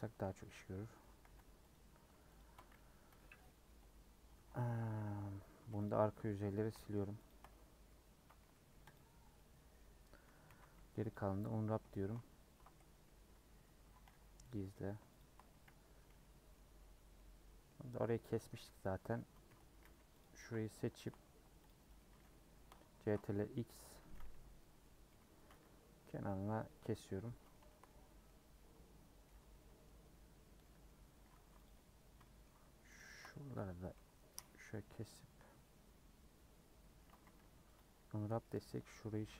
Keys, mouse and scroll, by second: 0.4 /, 1.2 h, 1.7 click, 3.0 /, 3.4 middle click, 3.7 Tab, 4.3 3, 4.6 scroll down 2, 4.9-5.5 scroll up 5, 5.7 c, 6.7 shift+middle click, 7.2 shift+click, 7.8 ctrl+KP_Add, 8.9 x, 9.3-10.4 middle drag, 10.4 a, 11.1 u, 11.9 shift+middle click, 12.4 Tab, 13.3 /, 14.0 h, 14.4 click, 15.9 /, 16.2 middle click, 16.6 Tab, 16.8-17.2 scroll up 2, 17.2 middle click, 18.0 scroll up 1, 18.5 scroll down 1, 18.7-20.1 middle drag, 20.1 c, 21.9-23.0 middle drag, 23.0 ctrl+x, 23.2-25.1 middle drag, 25.1 ;, 26.2-27.8 middle drag, 27.8-28.2 scroll up 4, 28.2-29.5 middle drag, 29.5 3, 29.8 middle click, 30.4 scroll down 2, 30.6 middle click, 30.9 scroll up 3, 31.6 alt+click, 32.2 shift+middle click, 32.9 alt+shift+click, 34.0 ;, 34.5 scroll down 1, 34.7-37.1 middle drag, 37.1 a, 37.8 u, 38.4-39.3 middle drag.